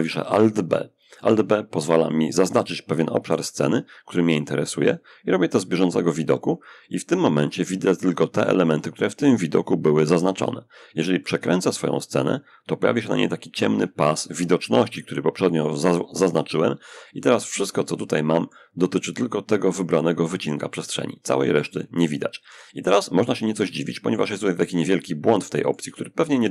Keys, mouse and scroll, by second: 3.2-6.3 drag, 10.4-12.9 middle drag, 16.1-17.3 middle drag, 17.3-24.0 drag, 24.0 middle click, 24.8-26.5 shift+drag.